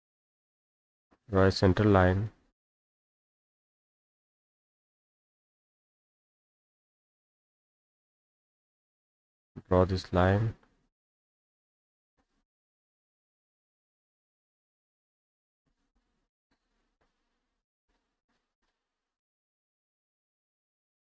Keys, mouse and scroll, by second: 0.0 click, 1.3-2.4 drag, 3.2 click, 4.6 click, 4.8 Escape, 5.1 middle click, 7.5 click, 9.0 click, 11.1 click, 12.1 click, 13.4 click, 14.9 click, 15.9 click, 16.7 middle click, 16.7-17.3 scroll up 4, 17.0 middle click, 19.8 click, 20.0 Escape, 20.2 Escape, 20.6 scroll up 2.